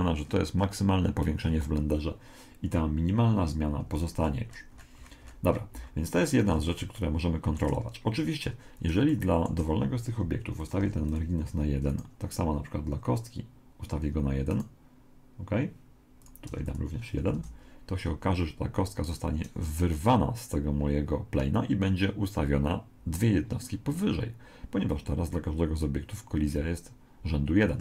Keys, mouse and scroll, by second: 0.2-2.7 middle drag, 3.8 Escape, 4.2-6.1 middle drag, 7.0-10.8 middle drag, 10.6 click, 11.9 right click, 14.5 right click, 16.2 click, 17.4 alt+a, 18.3 middle click, 23.9-26.6 middle drag.